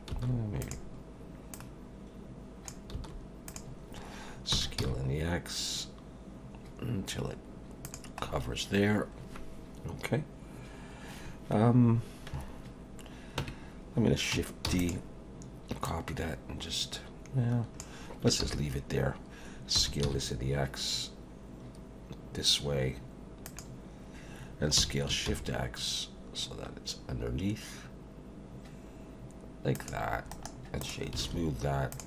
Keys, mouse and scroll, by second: 0.1 s, 1.5 click, 2.9 s, 4.5 s, 8.2-10.6 scroll down 4, 13.4 Tab, 14.7 shift+d, 15.8 click, 18.4 ctrl+z, 19.7 s, 24.8 s, 30.3 right click, 31.3 alt+a, 31.9 click.